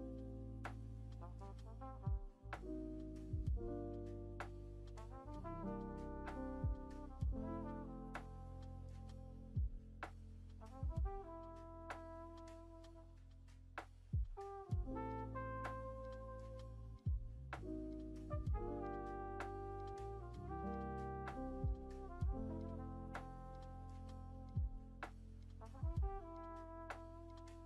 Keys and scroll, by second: 5.0 alt+Home, 18.5 ctrl+v, 23.1 ctrl+z, 25.0 ctrl+z, 26.9 ctrl+shift+c.